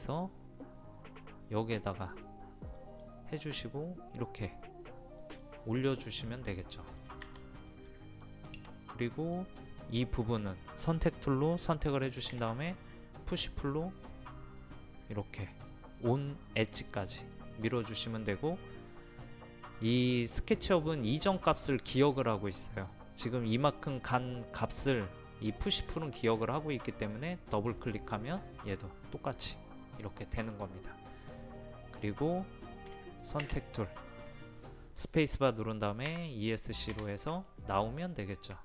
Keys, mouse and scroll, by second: 6.5 middle click, 7.2 Escape, 7.7-8.9 middle drag, 9.2 click, 12.3 p, 13.5 click, 17.5 middle click, 27.6-28.9 drag, 30.1 middle click, 33.9 space, 36.1 Escape, 37.5 middle click.